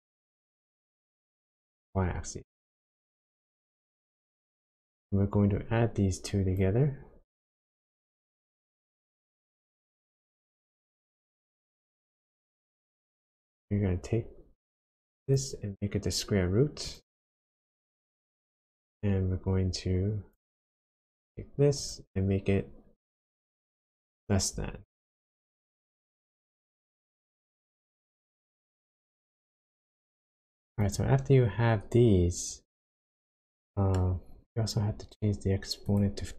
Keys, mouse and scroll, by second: 1.7 click, 4.0 click, 7.3 click, 9.9 click, 12.1 click, 15.2 click, 17.6 click, 18.7 click, 20.8 click, 21.7 click, 26.9 click, 27.4 scroll down 2, 30.8 click, 33.2 shift+middle click, 34.4-35.8 scroll up 4, 35.8 click.